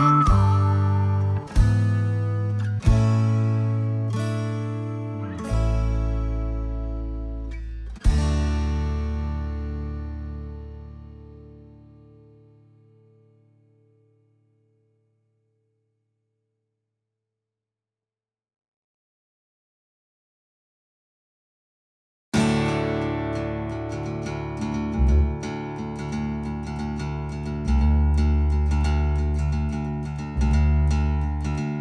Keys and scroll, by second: 0.3 ctrl+z, 0.8 space, 1.7 Escape, 1.9 Escape, 15.7-17.4 typing.